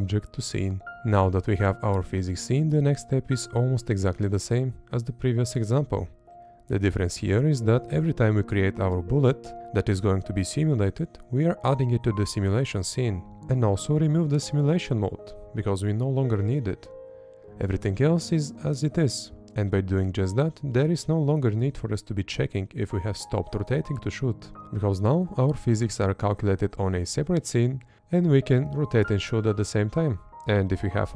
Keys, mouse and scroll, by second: 3.7 Up, 4.9 Up, 5.5 Left, 6.9 Up, 7.3 Up, 7.9 Up, 8.3 Up, 8.7 Right, 11.9 Up, 13.1 Up, 14.4 Up, 14.9 Up, 15.4 Up, 15.8 Up, 16.4 Up, 17.7 Up, 18.3 Up, 19.3 Left.